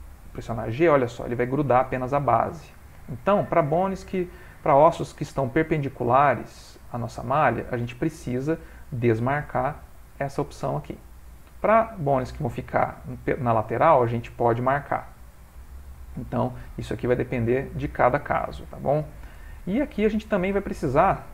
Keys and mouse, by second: 3.2 middle click, 4.5 ctrl+middle click, 4.6 ctrl+middle click, 6.5 click, 7.8 g, 9.5 click, 14.5 click, 18.6 shift+middle click, 18.9 shift+middle click, 19.6 ctrl+middle click, 19.8 shift+middle click, 19.9 shift+middle click, 20.1 middle click, 20.7 ctrl+middle click.